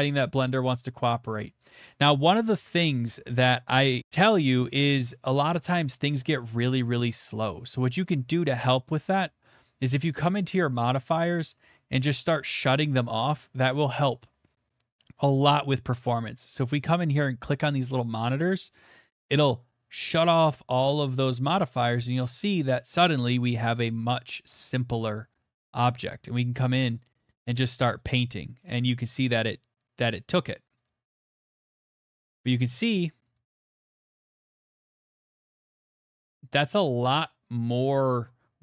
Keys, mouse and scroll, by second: 1.9 middle click, 2.0 middle click, 2.0 middle click, 2.2 middle click, 2.3 middle click, 2.4 middle click, 2.7 middle click, 3.0 middle click, 3.1 middle click, 3.2 middle click, 3.4 middle click, 3.5 middle click, 3.6 middle click, 4.0 middle click, 5.9-10.7 middle drag, 10.7 click, 15.5 click, 16.2 click, 16.8 click, 17.3 click, 17.9 click, 20.3 middle click, 20.5 scroll, 22.9 scroll, 25.5 middle click, 26.8 click, 27.2 click, 27.4 click, 27.8 click, 27.8 scroll, 28.1 click, 28.6 click, 29.2 click, 29.9-30.5 scroll, 30.8 click, 31.1 click, 31.8 middle click, 32.0 shift+middle click, 32.2 shift+middle click, 32.6 click, 33.0 click, 33.6 click, 34.1 middle click, 34.5 click, 34.8 click, 36.1 middle click, 36.2 scroll, 37.0 click, 37.8 click, 38.2 scroll.